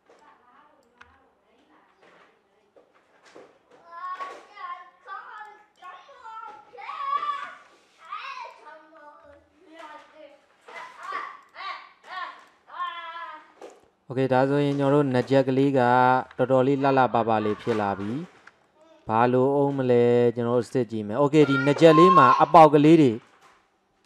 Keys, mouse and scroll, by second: 0.2 click, 1.1 g, 5.4 click, 6.3-7.0 scroll down 2, 7.0 scroll up 1, 7.6 Tab, 8.1 drag, 9.3 g, 12.1 click, 13.4-13.7 scroll down 1, 13.7-15.2 middle drag, 15.2 shift+z, 15.8 shift+z, 16.8 scroll down 4, 17.1-18.3 middle drag, 18.3-18.7 scroll up 1, 18.7-20.6 shift+middle drag, 20.6-21.2 scroll up 3, 21.2-24.0 middle drag.